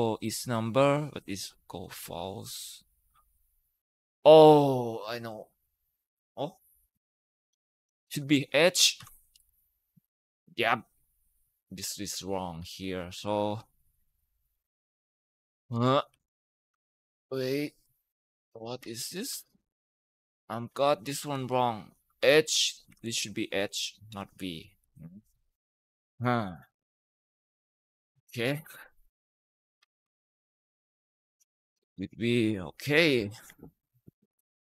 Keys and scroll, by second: 0.0 F9, 1.8 Escape, 7.7 BackSpace, 8.8 typing, 9.2 Return, 9.9 Up, 15.6 ctrl+Up, 15.9 ctrl+Up, 16.7 ctrl+Left, 19.0 ctrl+Right, 21.0 BackSpace, 22.0 h, 22.7 Down, 22.7 Right, 22.8 Right, 23.0 Right, 23.1 Right, 23.4 Right, 23.9 BackSpace, 24.6 h, 25.2 Return, 25.2 Return, 25.9 Up, 33.0 Escape, 33.3 Escape.